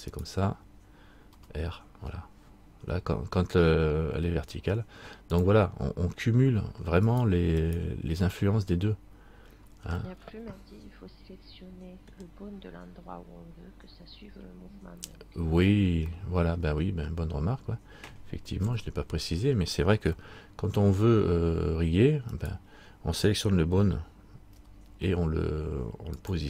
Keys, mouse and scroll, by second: 0.3 right click, 1.5 r, 7.3 right click, 10.1 right click, 10.2 middle click, 16.7 middle click, 18.8 KP_3, 20.3 shift+middle click, 22.5 right click, 24.7 r.